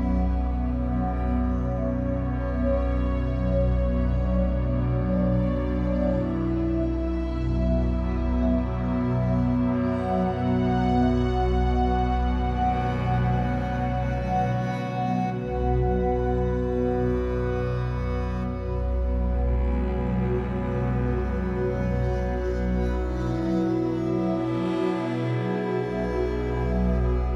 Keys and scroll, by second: 10.8 Escape, 15.0 Escape, 20.5 Escape, 27.2 F8.